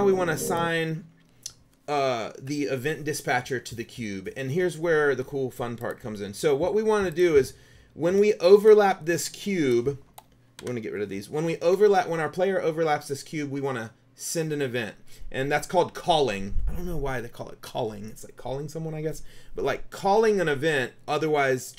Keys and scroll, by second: 10.7 Delete.